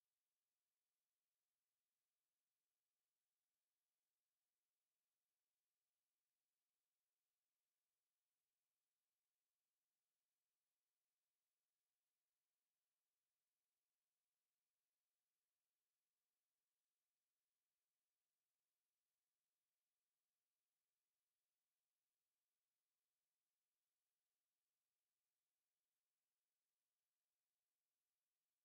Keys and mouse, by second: 0.6 KP_5, 1.4 middle click, 4.9 a, 6.1 middle click, 7.5-10.1 drag, 12.2-14.8 drag, 14.8 middle click, 18.8-19.4 middle drag, 21.5 click, 21.7 middle click, 22.6 click, 25.3-28.3 drag.